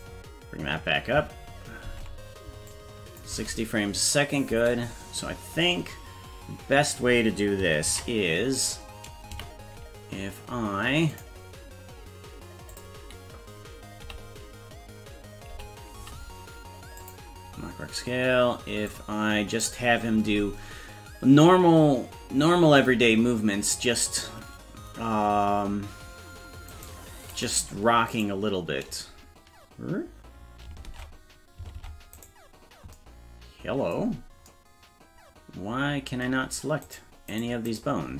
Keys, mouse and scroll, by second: 1.9 ctrl+Tab, 2.7 click, 3.3 space, 4.5 space, 8.0 ctrl+s, 9.4 a, 11.1 click, 12.7 click, 14.0 o, 16.0 i, 18.9 click, 26.7 right click, 27.3 right click, 28.1 right click, 30.9 ctrl+Tab, 31.8 ctrl+Tab, 32.1 right click, 36.8 right click, 37.3 right click, 37.7 right click.